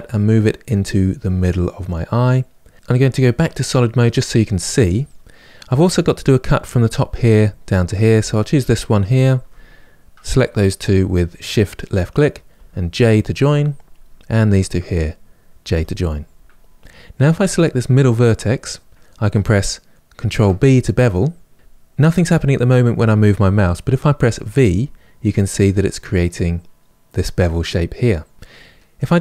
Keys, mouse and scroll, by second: 3.7 click, 8.0 click, 8.8 shift+click, 12.2 j, 13.6 click, 14.2 shift+click, 15.4 j, 16.8 click, 20.0 ctrl+b.